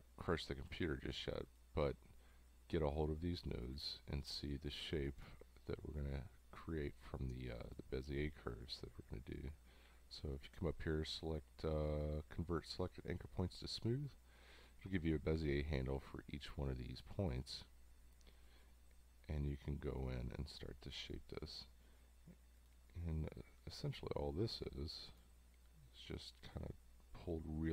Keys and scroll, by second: 0.7 a.